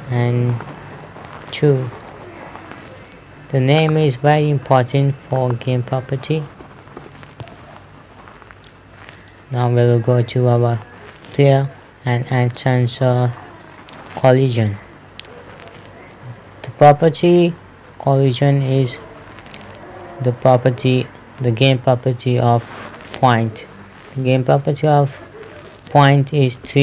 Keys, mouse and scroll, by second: 0.9 click, 1.7 KP_2, 2.1 Return, 4.2 right click, 5.9 click, 7.1 KP_3, 7.5 Return, 9.6 right click, 12.7 click, 19.0 click.